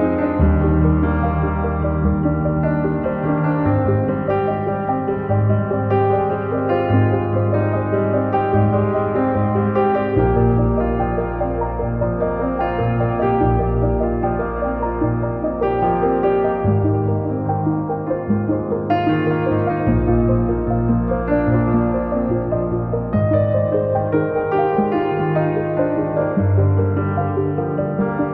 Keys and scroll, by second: 0.0 x, 0.6 Return, 1.3 Escape, 6.0 m, 8.3 Up, 11.2 space, 14.0 space, 14.1 Escape, 16.7 Up, 18.8 space, 21.0 Return, 21.7 Escape, 25.6 2, 25.9 Return, 26.9 ctrl+z, 27.6 m.